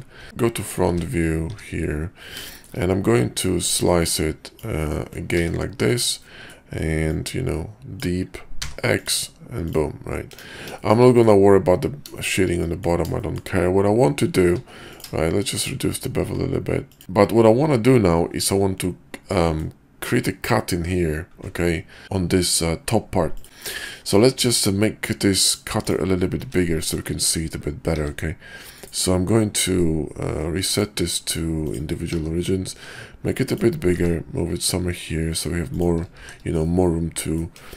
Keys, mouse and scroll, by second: 0.2 `, 0.6 KP_5, 0.9 `, 1.5 `, 2.5 shift+click, 3.7-6.0 drag, 6.2 middle drag, 10.3 KP_5, 10.7 shift+middle click, 11.1 middle click, 12.2 shift+middle drag, 12.6 middle drag, 13.1 shift+middle drag, 14.3 q, 19.2-19.7 drag, 24.0 click, 24.4 q, 26.4 `, 26.9 KP_5, 27.9 s, 30.7 click, 32.1 s, 33.9 g, 36.2 shift+2, 36.6 click, 36.7-37.4 middle drag, 37.6 KP_5.